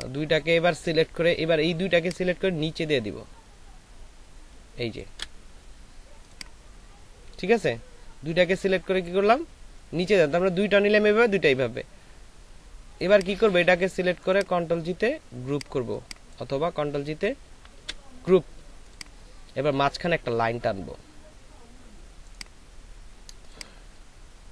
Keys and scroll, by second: 17.7 ctrl+g.